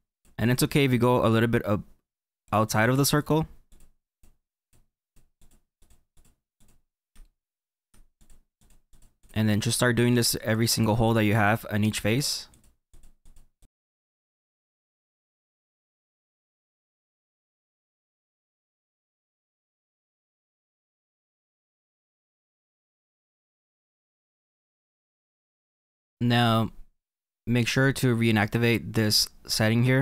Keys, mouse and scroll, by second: 5.8 click, 6.2 click, 6.6 click, 7.2-8.3 shift+middle drag, 8.3 click, 8.6 click, 9.0 click, 9.3 click, 9.7 click, 10.0 click, 10.6 click, 11.2 click, 11.5 click, 12.1 click, 12.6 Left, 13.0 Left, 13.3-13.9 Left, 14.0 shift+middle click, 14.1 click, 14.2-15.6 Left, 15.7-16.0 click, 15.7 click, 15.8 click, 16.0 middle click, 16.1 scroll down 4, 16.1 shift+middle click, 16.3 middle click, 16.4 click, 16.4 click, 16.4 Left, 16.5 Left, 16.5-17.2 Left, 17.3 ctrl+z, 17.4 Left, 17.6 middle click, 17.8-18.2 Left, 18.3 click, 18.3 click, 18.4 click, 18.6 ctrl+z, 18.6 click, 18.7 scroll down 1, 18.7 middle click, 19.2 click, 19.2-19.9 click, 19.4 click, 19.4 click, 19.5 click, 20.0 middle click, 20.1 scroll up 6, 20.2 middle click, 20.3 scroll down 2, 20.4 click, 20.5 click, 20.6 scroll up 1, 20.7 click, 20.7 click, 20.7 click, 20.8 middle click, 20.9-21.6 click, 21.1 click, 21.1 click, 21.7 scroll down 3, 21.7 middle click, 21.9 middle click, 22.1 scroll up 1, 22.2 shift+middle click, 22.3-22.8 click, 22.3 click, 22.4 click, 22.8-24.0 Left, 24.0 scroll down 1, 24.1-24.7 Left, 24.8 click, 24.9 click, 24.9 click, 25.0 click, 25.1 scroll down 4, 25.1 middle click, 25.3 scroll up 8, 25.4 click, 25.4 click, 25.5 click, 25.6 middle click, 25.7 middle click, 26.1-28.5 scroll down 8, 29.5 click.